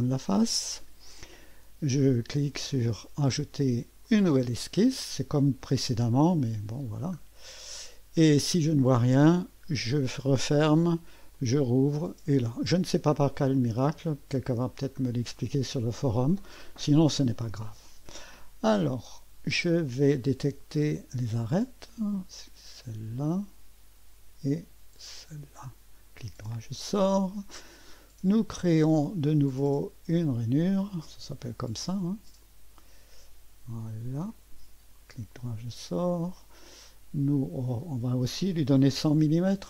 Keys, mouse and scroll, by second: 4.0 click, 5.2-6.1 scroll down 1, 6.1 right click, 7.0 right click, 7.4-9.8 right drag, 9.8 click, 11.3 click, 12.7-13.2 scroll up 1, 13.2-13.9 scroll down 1, 13.9-15.4 right drag, 21.4 click, 23.3 click, 23.8 click, 25.2 click, 26.2 right click, 30.2 click, 32.4 click, 34.3 click, 35.0-36.2 middle drag, 36.2 click, 37.7 click, 39.0 shift+9.